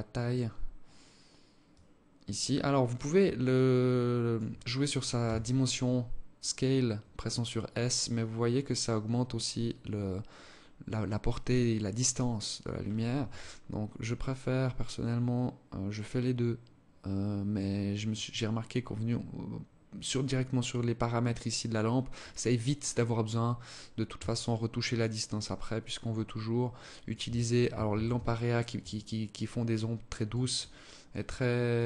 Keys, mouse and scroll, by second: 1.0 click, 2.8 alt+click, 4.5 s, 14.3 click, 17.4 click, 23.5 shift+click, 27.2 ctrl+s, 28.2 alt+click, 31.0 click.